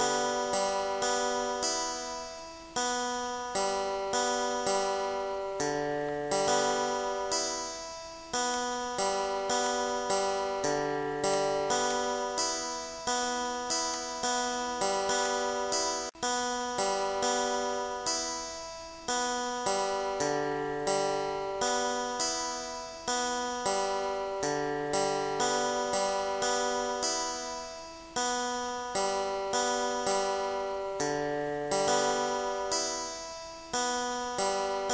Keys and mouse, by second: 0.7 click, 1.8 click, 3.3 click, 3.7 click, 5.4 click, 6.4 click, 7.4 click, 12.1 click, 14.5 click, 18.8 click, 20.1 click, 21.9 ctrl+z, 23.5 click, 24.8 click, 28.8 click, 30.6 click, 32.5 click, 33.1 click, 34.5 click.